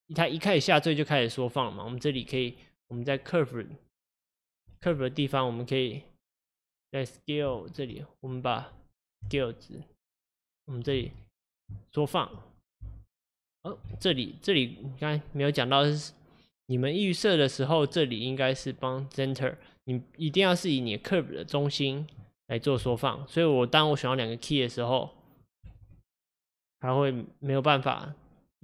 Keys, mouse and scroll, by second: 4.2 click, 6.5-9.3 drag, 9.3 s, 11.0 ctrl+z, 11.3-12.9 drag, 12.9 s, 14.0 ctrl+z, 14.8-22.8 drag, 22.8 s, 25.8 ctrl+z.